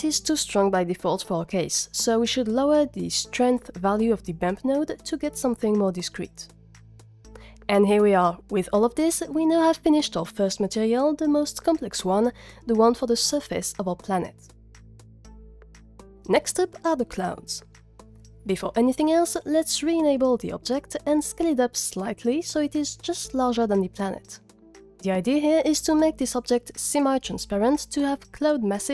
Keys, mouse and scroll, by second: 4.7-6.7 drag, 18.9 click, 20.9 click, 21.7 z, 23.1 click, 23.6 z, 24.0 s, 25.0 click, 27.2 z.